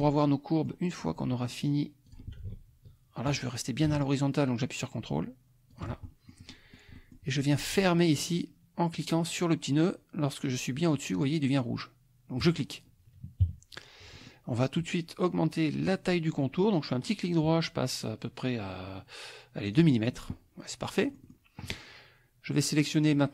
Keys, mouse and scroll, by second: 0.3 click, 2.0 click, 5.7 ctrl+click, 6.0-6.9 ctrl+scroll up 1, 6.9-7.3 ctrl+scroll up 1, 12.4 click, 13.4 KP_Subtract, 14.2 click, 17.0 right click, 19.7 click, 21.1 middle click, 21.1 scroll down 1, 21.2 middle click, 21.3 scroll up 1.